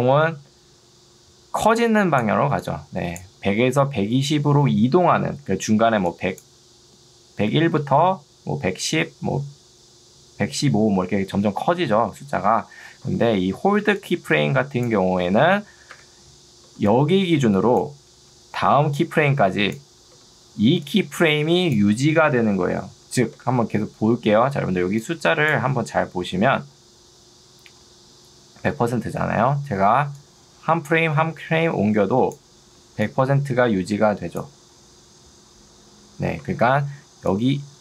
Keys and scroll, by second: 13.0 Escape, 13.8 ctrl+2, 16.0 Escape, 16.8 ctrl+2, 20.2 Escape, 20.8 2, 23.4 Escape, 28.8 Escape, 33.0 2, 36.4 Escape, 37.0 ctrl+2.